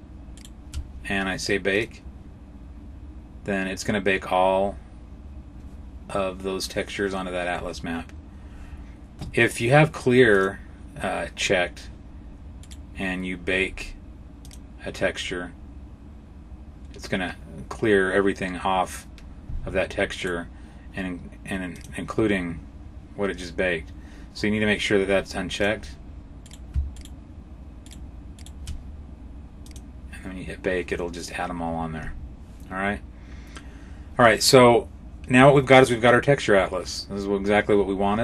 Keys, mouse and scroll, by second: 0.2 shift+right click, 1.6 click, 10.2 click, 12.5 right click, 14.3 click, 20.0 right click, 21.6 click, 25.4 click, 26.3 right click, 26.9 shift+right click, 27.7 shift+right click, 28.2 right click, 29.5 click, 37.8-38.2 scroll up 4.